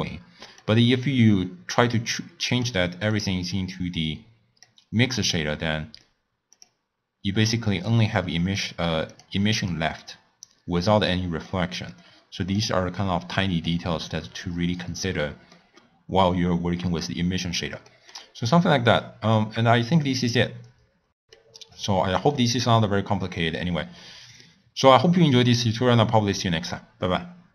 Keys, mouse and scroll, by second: 3.1 click, 6.6 click, 8.6 click, 9.2 click, 9.7 click, 10.1 click, 12.5 click, 13.2 click, 14.8-15.5 scroll down 3, 15.5-19.3 middle drag, 19.3 click, 21.0-27.5 scroll down 4.